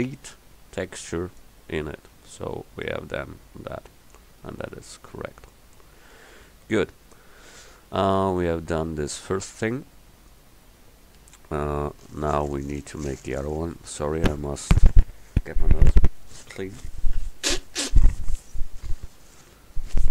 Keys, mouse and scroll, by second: 2.8 Tab, 8.3 a.